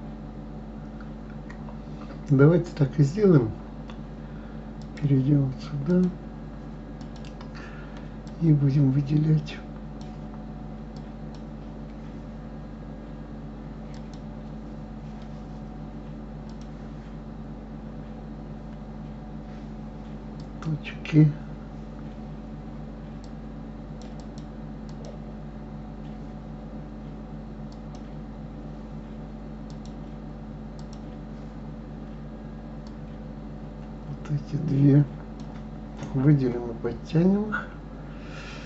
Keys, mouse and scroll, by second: 4.8 click, 5.9 click, 7.0 click, 8.2-14.1 drag, 16.5 click, 19.6-20.0 scroll up 2, 20.3-23.8 drag, 24.1-27.2 drag, 27.7 click, 29.7-32.7 drag, 32.8-35.9 drag.